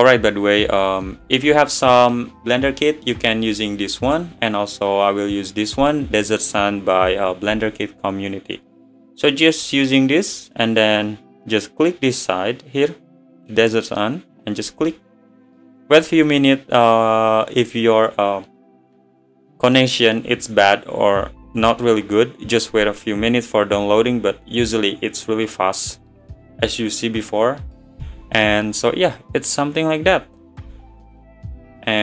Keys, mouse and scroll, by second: 0.9-5.0 drag, 9.7 click, 30.2-31.5 drag, 31.5-32.0 middle drag.